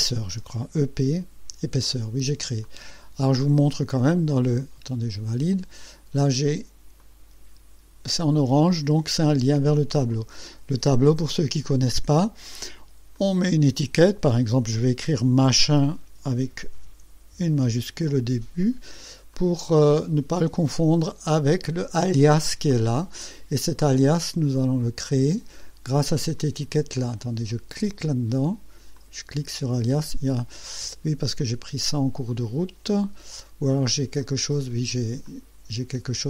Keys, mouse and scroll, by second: 0.3 e, 1.0 p, 1.8 click, 2.6 click, 5.3 click, 7.0-8.1 drag, 10.1 click, 13.1 click, 15.4-17.6 typing, 19.3 click, 21.2 click, 23.8 click, 25.0 click, 26.4 click, 27.2 click, 27.8 click, 28.9 click, 31.4 click, 34.2 click, 35.2 click.